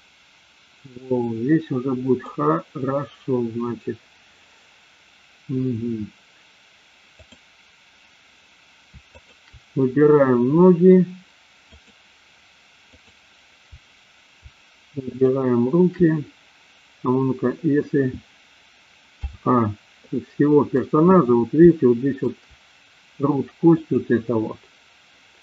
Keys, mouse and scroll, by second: 9.1-9.8 shift+drag, 11.7 shift+click, 15.1-15.8 shift+drag, 19.4 a, 19.9 middle click, 21.7-22.2 shift+middle drag, 23.8 click.